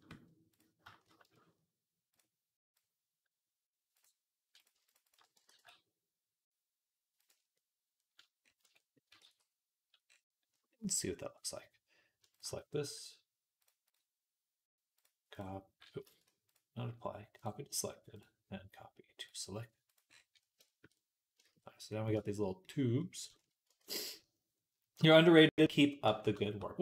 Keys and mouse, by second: 2.0-3.9 drag, 4.7 alt+shift+click, 5.3 alt+s, 8.4 Tab, 9.1 ctrl+s, 11.5 middle click, 12.1 shift+click, 12.2-13.4 shift+middle drag, 13.4 click, 13.5 middle click, 13.7 click, 13.7-14.8 middle drag, 14.8-19.8 drag, 15.9 ctrl+z, 19.8-26.8 middle drag, 23.7 ctrl+s.